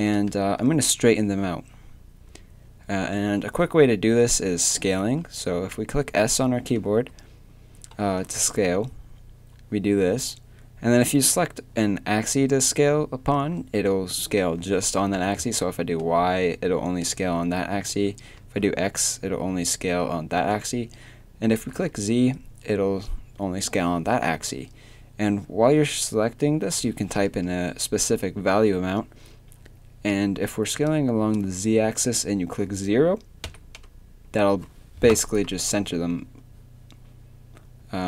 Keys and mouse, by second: 4.7 s.